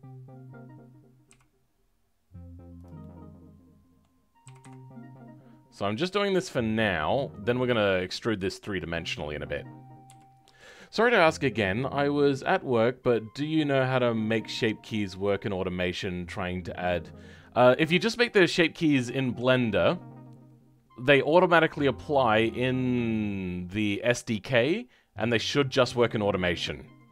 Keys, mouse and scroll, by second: 1.2 g, 2.9-4.3 middle drag, 4.3 g, 7.1-8.7 middle drag, 8.7 click, 10.0 KP_7.